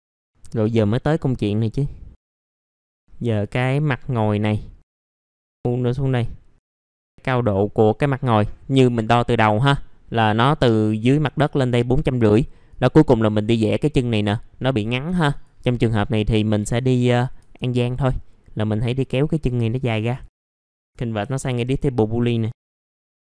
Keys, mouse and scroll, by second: 0.1 middle click, 0.2 scroll up 1, 0.4 middle click, 1.7 click, 2.4 middle click, 2.6 click, 2.9 middle click, 3.2 click, 4.1 middle click, 4.9-8.1 drag, 13.3 middle click, 15.3 click, 18.3-19.1 scroll up 1, 19.1-20.3 drag, 20.3 F3, 20.6 middle click, 22.2 middle click, 22.9 F3, 22.9-23.3 scroll down 1.